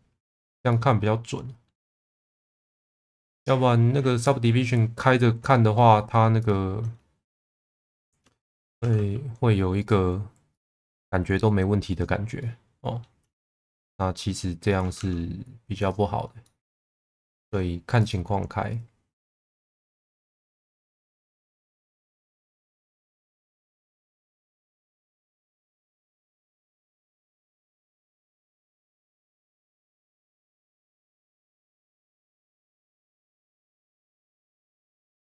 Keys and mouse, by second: 0.6 middle click, 2.2 click, 2.5 middle click, 4.2 middle click, 4.9 middle click, 7.4 click, 8.8 shift+v, 9.7 click, 10.9 shift+v, 11.9 click, 12.3 middle click, 13.3 shift+middle click, 13.8 middle click, 14.6 click, 14.9 shift+v, 16.4 middle click, 18.0 click, 18.7 click, 21.8 click, 24.7 click, 29.3 click, 31.3 Tab, 31.7-33.7 middle drag, 35.0 Tab.